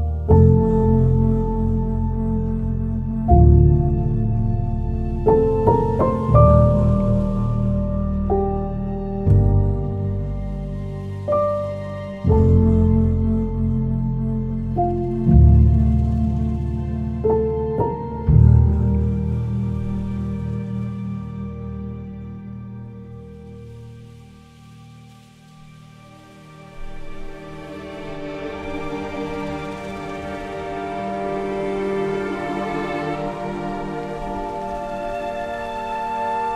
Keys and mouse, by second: 2.5 alt+z, 3.5 z, 5.6 alt+z, 6.8 alt+z, 7.8 alt+z, 8.6 g, 9.2 click, 10.1 alt+z, 10.7 alt+z, 11.3 g, 12.2 click, 13.2 alt+z, 13.7 alt+z, 14.3 g, 14.8 click, 15.5 alt+z, 15.7 click, 16.5 alt+z, 17.0 g, 17.8 click, 18.6 ctrl+s, 25.8 middle click, 26.9 alt+z, 27.7 alt+z, 28.0 Tab, 29.0 z.